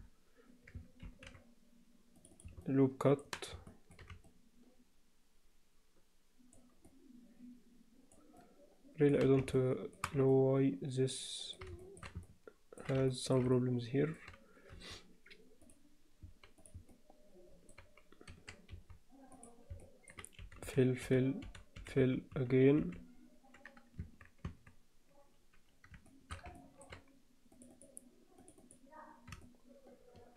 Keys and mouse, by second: 1.0 ctrl+r, 2.6 middle click, 3.7 alt+shift+middle click, 4.3-6.5 alt+middle drag, 6.9-8.1 alt+middle drag, 8.4 alt+middle click, 9.5 alt+shift+middle click, 10.3-11.5 middle drag, 11.8 shift+middle click, 12.3 ctrl+alt+middle click, 13.1 shift+middle click, 13.5 alt+middle click, 14.7 x, 16.9 alt+middle click, 18.3 2, 19.3 click, 19.8 middle click, 20.4-22.8 typing, 24.0 Tab, 24.5 Tab, 26.1 alt+shift+middle click, 26.5 ctrl+alt+middle click, 27.5 click, 28.4 click, 28.6 click, 29.4-30.3 shift+middle drag.